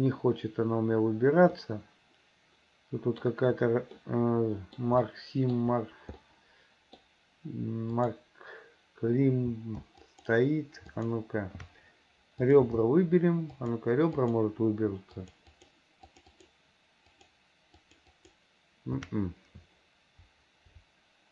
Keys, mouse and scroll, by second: 1.6-3.3 middle drag, 4.0 middle click, 5.1 middle click, 6.3 middle click, 8.0 click, 10.0 alt+shift+click, 11.0 alt+shift+click, 12.5 click, 13.6 alt+shift+click, 14.2 alt+shift+click, 15.2 alt+shift+click, 15.6 alt+shift+click, 16.1 alt+shift+click, 16.4 alt+shift+click, 17.1 alt+shift+click, 17.8 alt+shift+click, 18.2 alt+shift+click.